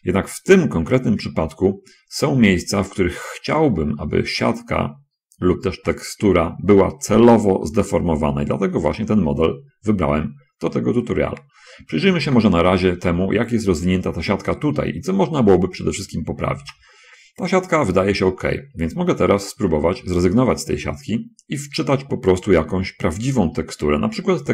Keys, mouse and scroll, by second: 0.5 shift+middle click, 4.4 middle click, 5.2-7.8 middle drag, 8.0-9.4 middle drag, 9.6-11.0 middle drag, 11.8 scroll up 2, 12.6 shift+space, 17.0 shift+space, 17.8 scroll up 2.